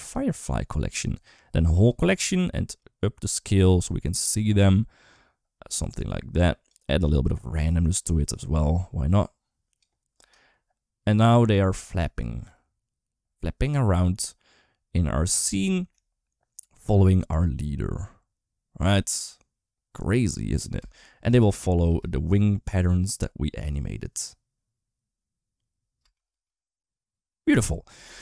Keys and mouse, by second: 1.6 click, 2.7-6.6 drag, 7.2-9.6 drag, 10.0 space, 11.3 middle click, 15.7 KP_1, 20.6 space, 21.1 space, 21.5 space, 25.8 space, 26.1 space, 27.9 space.